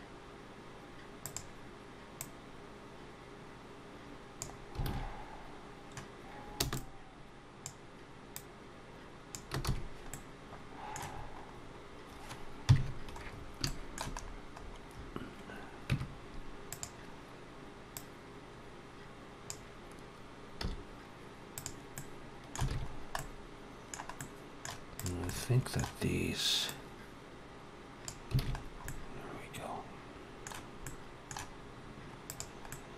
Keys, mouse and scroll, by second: 2.0 click, 4.7 alt+a, 6.4 b, 8.2 click, 9.5 alt+a, 9.5 s, 9.9 middle click, 10.9-12.5 scroll down 5, 12.5 KP_3, 13.1-13.4 scroll up 3, 13.5 shift+middle click, 14.0-15.5 scroll up 2, 15.5 scroll up 2, 15.7 Tab, 16.5 click, 17.8 click, 20.5 z, 21.8 middle click, 22.5 alt+a, 22.7 scroll down 2, 23.0 middle click, 24.0 middle click, 24.8 click, 25.1 middle click, 26.5 click, 28.2 alt+a, 28.4-28.7 scroll down 3, 28.7 middle click, 30.7 middle click, 32.1 click, 32.5 middle click.